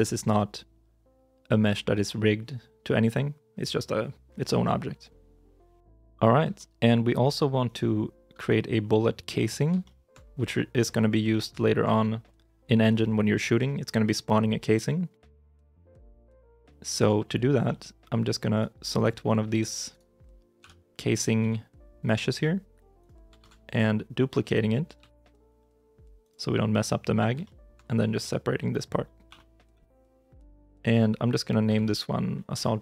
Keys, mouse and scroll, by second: 6.4-7.5 shift+scroll, 7.5 right click, 8.2 h, 9.7 shift+middle click, 10.2 scroll up 1, 10.4 middle click, 11.2 shift+middle click, 16.0 scroll up 1, 16.5 shift+middle click, 17.9 scroll up 1, 18.4 right click, 19.2 Tab, 19.8 right click, 20.5 l, 20.8 middle click, 21.3 g, 23.2 ctrl+z, 24.8 shift+d, 27.3 shift+middle click, 29.1 p, 29.6 Return, 30.3 right click, 31.5 F2, 32.4 Right, 32.7 BackSpace.